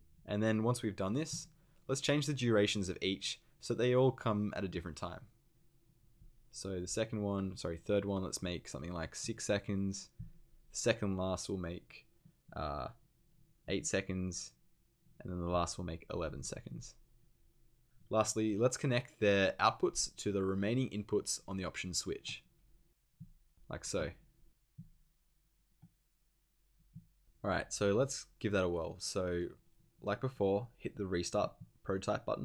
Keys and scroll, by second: 9.2 6, 10.1 6, 13.6 8, 16.1 1.